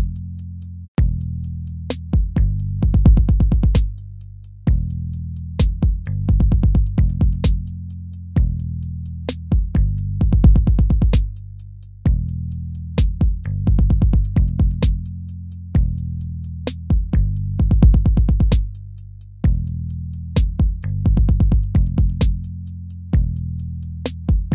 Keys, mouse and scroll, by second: 2.6 ctrl+-, 4.5 right click, 5.1 BackSpace, 14.0 ctrl++.